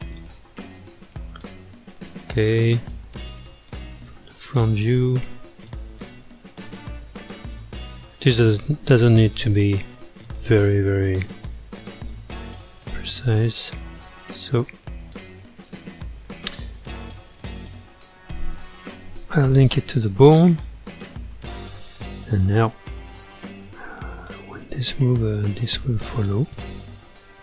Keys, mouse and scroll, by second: 0.0 g, 1.3 r, 3.2-7.3 middle drag, 7.3 r, 9.1-12.1 middle drag, 15.5 shift+click, 17.1 ctrl+Tab, 17.5 click, 19.3 ctrl+p, 21.7-23.1 middle drag, 23.1 click, 23.7 g, 25.5-27.4 middle drag.